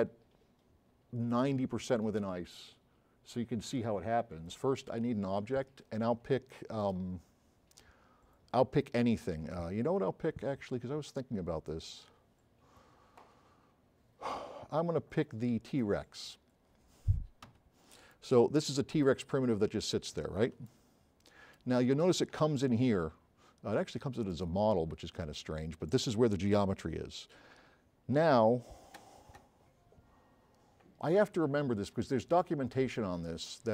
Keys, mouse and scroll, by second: 6.9 click, 17.5 a, 18.1 s, 18.2-19.1 right drag, 19.6 scroll up 2, 19.9 scroll down 2, 20.7-21.7 right drag, 20.7 s, 24.4 click.